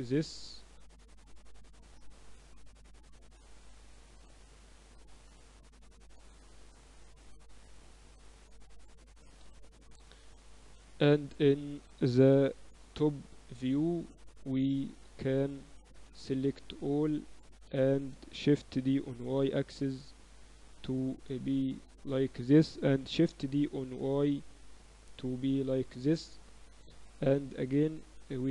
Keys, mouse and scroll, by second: 0.8-2.3 middle drag, 2.3-6.8 drag, 3.9 a, 4.6 b, 7.4 click, 8.5-10.7 typing, 10.9 Tab, 12.3 ctrl+alt+shift+c, 13.6-15.5 drag, 15.9 Tab, 16.1 a, 16.2 a, 18.7 shift+d, 20.3 Tab, 23.1 shift+d.